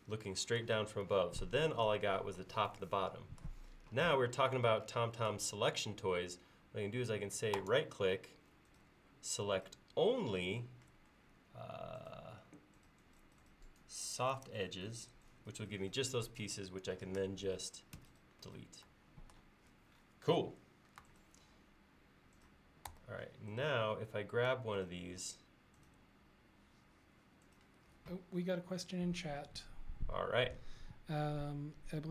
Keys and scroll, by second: 18.0 Delete, 23.0 f.